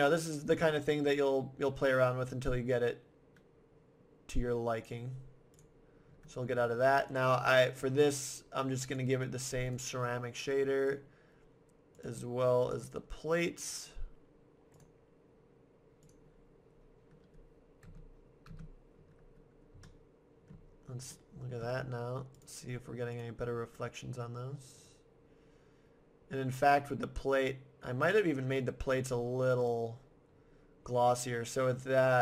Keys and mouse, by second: 1.0-2.4 middle drag, 4.8-6.4 drag, 7.1-8.9 right drag, 10.8-12.7 right drag, 11.9-13.7 drag, 13.7-15.4 right drag, 14.7 click, 16.5-17.8 middle drag, 17.8 KP_0, 18.5 KP_0, 19.5 middle click, 22.4 middle click, 23.2 middle click, 24.1-28.6 middle drag, 28.6-31.4 right drag.